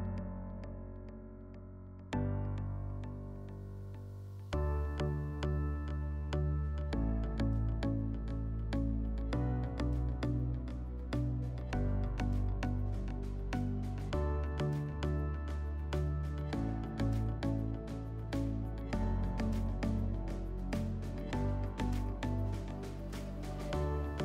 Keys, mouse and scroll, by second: 0.0 shift+click, 0.6 shift+click, 1.2 shift+click, 2.2 click, 3.5 click, 4.0 click, 4.9 click, 5.4 click, 7.8-8.9 drag, 9.6 click, 12.8-14.4 drag, 15.5-17.2 drag, 18.2 p, 20.5 alt+middle click, 20.9 w, 22.5 click, 23.1 alt+click, 24.0 alt+middle click.